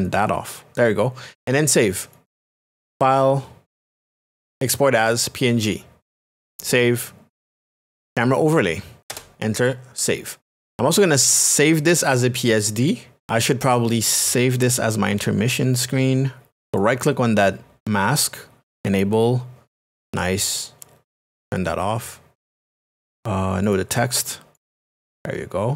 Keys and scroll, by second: 8.0 y, 9.1 Return.